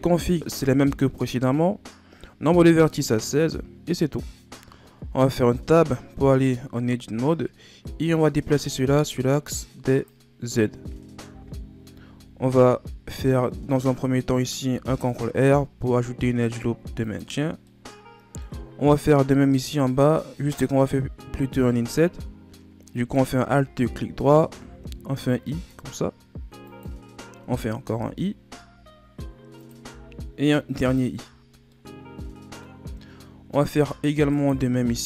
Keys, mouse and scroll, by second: 0.1-2.2 shift+scroll down 4, 5.0 Tab, 5.8-6.5 scroll down 1, 6.5-7.1 shift+scroll up 3, 8.2-11.2 drag, 11.3 o, 12.4-14.7 shift+scroll up 4, 14.7 ctrl+r, 17.7-18.8 middle drag, 18.8-21.3 scroll up 1, 23.0 alt+right click, 29.9 i, 31.7-33.0 middle drag, 33.0-34.3 shift+scroll up 3, 34.3 alt+right click.